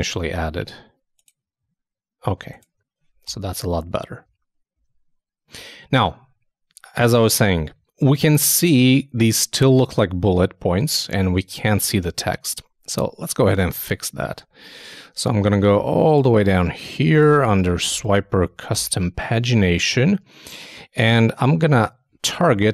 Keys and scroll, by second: 12.4 super+Tab.